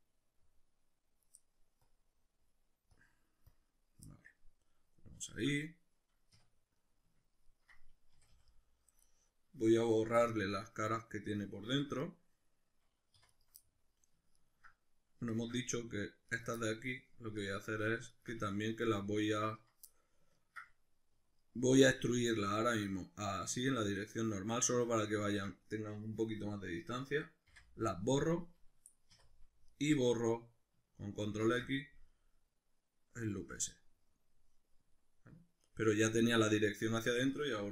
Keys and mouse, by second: 1.9-4.4 drag, 4.4-9.1 middle drag, 6.3 \, 8.1 a, 9.1 right click, 10.2 \, 10.5-13.3 middle drag, 11.7 Tab, 13.1 3, 13.3 right click, 13.6 middle click, 14.4 ctrl+right click, 15.3 shift+right click, 15.7 ctrl+right click, 16.3 ctrl+right click, 16.6 middle click, 17.4 ctrl+right click, 18.1 shift+right click, 18.5 ctrl+right click, 18.8 ctrl+right click, 19.4 ctrl+right click, 19.8-25.1 middle drag, 21.6 alt+e, 25.1 click, 27.5 x, 29.1 2, 29.7 alt+right click, 31.5 ctrl+x, 32.1-37.7 middle drag.